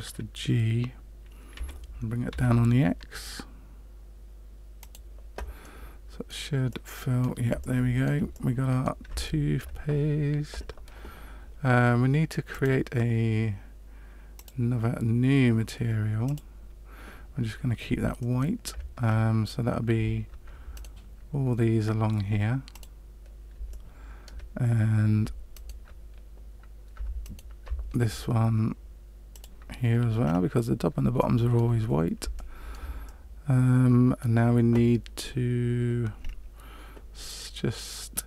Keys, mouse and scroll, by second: 1.5 g, 5.6 middle click, 6.8 middle click, 7.6 shift+middle click, 8.3 middle click, 9.2 shift+middle click, 12.5 click, 14.3 click, 16.2 click, 18.2 shift+middle click, 19.0 scroll up 2, 20.7 alt+right click, 22.7 click, 23.7 shift+middle click, 25.5 alt+right click, 27.2 alt+shift+right click, 29.3 click, 30.2-30.9 scroll down 3, 31.1 shift+middle click, 32.5 shift+middle click, 33.0 middle click, 36.2-38.0 scroll up 1, 38.0-38.2 scroll up 1.